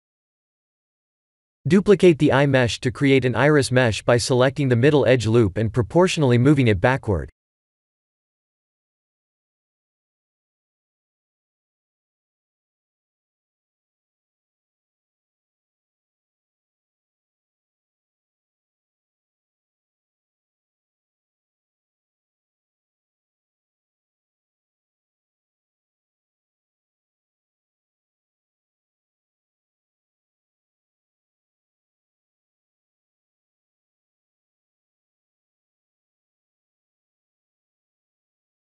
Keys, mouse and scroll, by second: 1.9 shift+d, 3.6 KP_3, 4.1-4.6 scroll up 6, 4.6 shift+middle click, 5.4 s, 7.6 click, 8.7 scroll up 5, 9.2 shift+middle click, 9.9-10.6 scroll up 1, 10.6-11.0 scroll up 1, 11.0 click, 14.5 shift+middle click, 16.0-17.4 scroll up 1, 17.4 Tab, 18.0 2, 18.8 alt+click, 19.4 middle click, 21.8 scroll up 1, 22.0 ctrl+KP_3, 24.0 alt+shift+click, 24.7 KP_1, 26.4 KP_3, 28.1 click, 30.6 click.